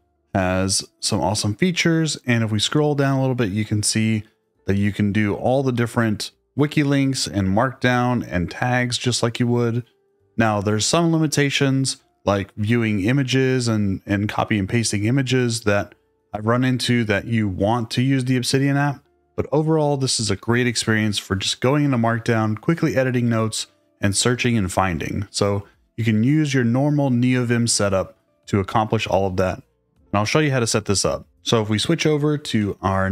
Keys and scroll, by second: 31.6 super+Tab.